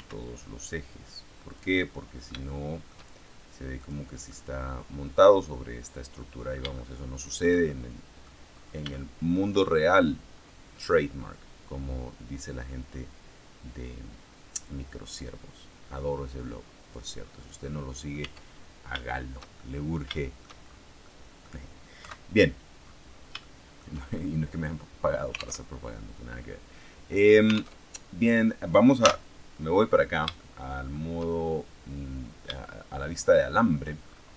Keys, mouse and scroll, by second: 1.4 click, 1.7-3.0 middle drag, 3.7 click, 4.2 middle click, 6.1-7.5 middle drag, 7.6 shift+middle click, 8.8 shift+middle click, 14.5-17.0 drag, 17.0-17.6 scroll down 1, 17.6 middle click, 18.1 Tab, 18.5-18.9 scroll down 1, 18.9 shift+middle click, 19.8 shift+middle click, 20.1 shift+middle click, 21.0 middle click, 21.9 KP_3, 23.2 shift+scroll down 1, 23.3 shift+middle click, 23.9-25.0 shift+scroll up 1, 25.5 alt+Tab, 27.7 alt+Tab, 28.9 z, 30.3 shift+middle click, 31.3-32.5 shift+scroll down 1, 32.5-33.7 shift+middle drag, 33.9-34.3 shift+scroll up 1.